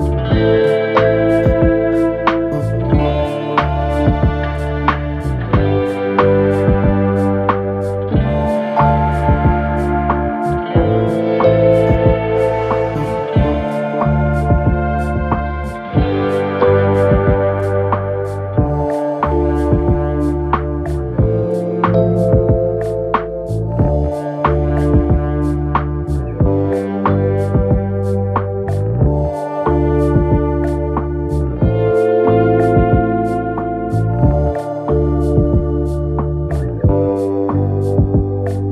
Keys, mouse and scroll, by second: 1.7-2.9 drag, 2.9-3.7 scroll down 4, 3.7-5.0 shift+middle drag, 5.0 2, 5.5 click, 6.0 shift+click, 6.6 shift+click, 7.7 scroll down 1, 8.0 e, 11.3 shift+middle click, 11.9-12.3 scroll up 1, 12.3 1, 13.0 click, 13.6 click, 16.1 click, 18.6 click, 19.1 click, 22.0 2, 22.5 click, 22.7 click, 24.1 click, 25.0 KP_7, 26.1-27.1 shift+middle drag, 27.1-28.1 drag, 31.0 ctrl+r, 34.7 click, 34.8 click, 35.9 g, 38.5 click, 38.6 click.